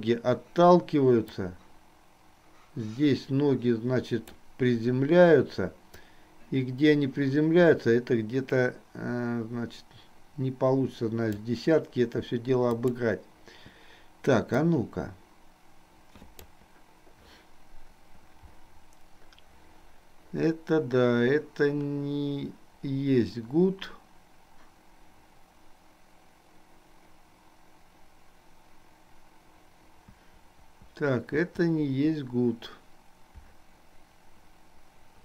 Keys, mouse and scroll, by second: 1.6-4.6 drag, 6.2-11.6 drag, 12.8 click, 14.7-16.6 drag.